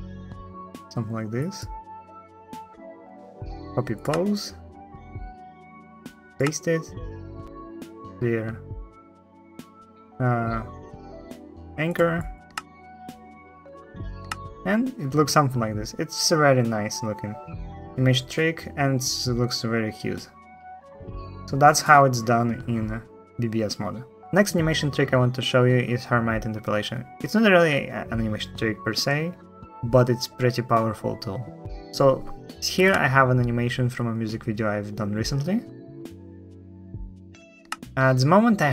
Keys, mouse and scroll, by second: 4.5-5.2 drag, 12.3 space, 14.0 space, 32.6 space, 37.4 space.